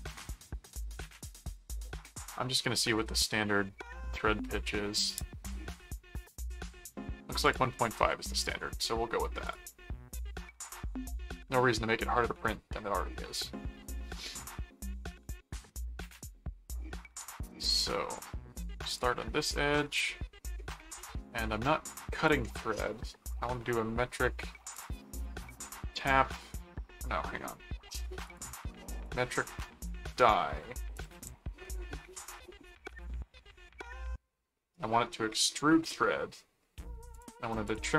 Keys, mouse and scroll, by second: 1.4 click, 5.0 click, 7.4 click, 8.0 ctrl+w, 8.4 click, 9.4 click, 10.7 click, 15.4 middle click, 16.2 middle click, 18.9 click, 22.2 click, 24.7 click, 25.6 click, 27.9 click, 29.0 click, 30.9 click, 33.8 middle click, 35.2 scroll down 2, 36.3 scroll up 2, 37.1 click.